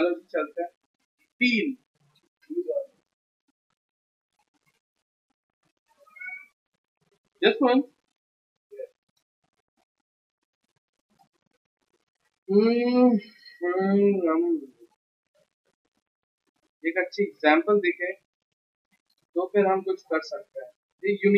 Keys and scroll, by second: 0.5 alt+d, 0.7-2.1 typing, 3.9-5.6 typing, 10.5-11.2 typing.